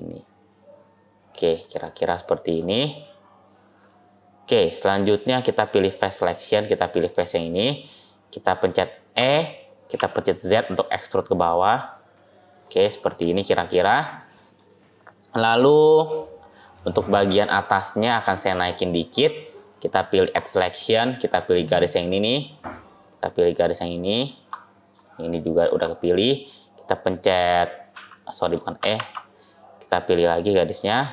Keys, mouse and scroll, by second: 1.6 middle click, 3.6 click, 5.8 click, 7.4 middle click, 9.0 e, 12.9 click, 13.2 middle click, 13.7 scroll up 2, 14.0 middle click, 17.2 middle click, 20.2 click, 21.5 click, 21.7 click, 23.5 shift+click, 24.0 shift+click, 24.4 middle click, 27.8 e, 28.8 ctrl+z, 30.0 click, 30.1 click.